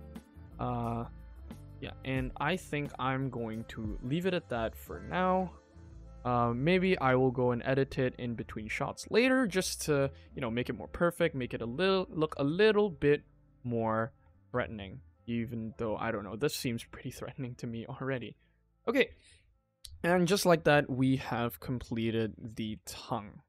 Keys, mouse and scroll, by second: 0.4 Tab, 0.7 click, 1.0 middle click, 2.0 shift+middle click, 3.5 ctrl+s, 3.6 middle click, 4.5 click, 4.8 middle click, 5.3 Tab, 5.6 middle click, 5.8-6.5 scroll down 1, 6.5 alt+click, 6.9 g, 9.2 middle click, 9.4 Tab, 9.6 click, 10.0 ctrl+s, 10.1 middle click, 10.6 scroll up 2, 10.8 middle drag, 11.1 scroll down 1, 11.3 shift+middle drag, 11.7 scroll up 1, 11.9 middle click, 12.2 Tab, 12.5 shift+middle click, 13.1 alt+click, 13.8 alt+click, 14.3 g, 16.7 click, 17.0 scroll down 2, 17.2 scroll up 1, 17.6 scroll down 1, 17.6 scroll down 1, 17.8 middle click, 18.1 ctrl+s, 18.3 shift+middle click, 18.6 middle click, 21.2 middle click, 22.3 click, 22.6 r.